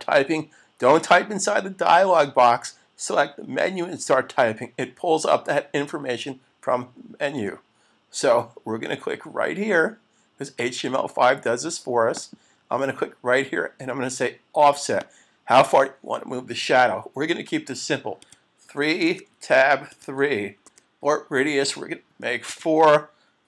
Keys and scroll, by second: 7.4 Return, 19.0 Tab.